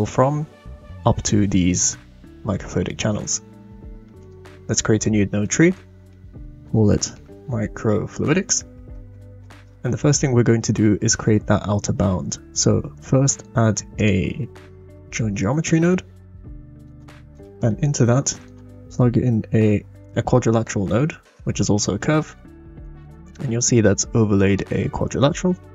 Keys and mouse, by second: 4.2 click, 5.5 middle click, 6.3-9.3 shift+drag, 9.4 middle click, 12.6 shift+a, 17.7 click, 17.7 right click, 18.0 shift+a, 20.6 click, 21.2 click.